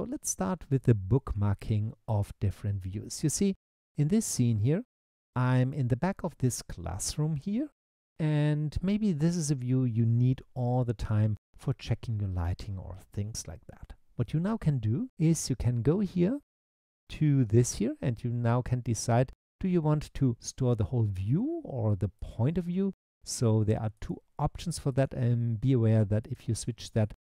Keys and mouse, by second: 5.7 middle click, 22.2 click, 23.3 click, 24.0 click, 24.9 click, 26.2 click.